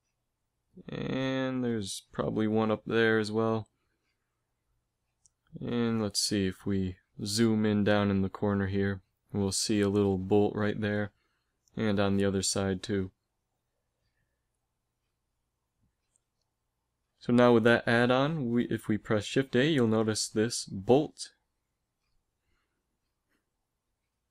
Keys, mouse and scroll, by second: 17.7 shift+a.